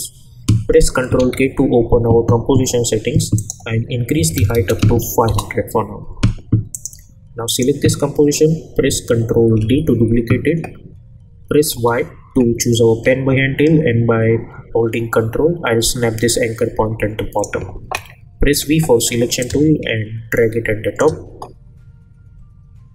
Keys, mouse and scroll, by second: 1.2 ctrl+k, 3.4 click, 5.3 Return, 6.7 click, 9.5 ctrl+d, 11.7 y, 16.3-17.5 ctrl+drag, 18.5 v, 19.4-22.9 drag.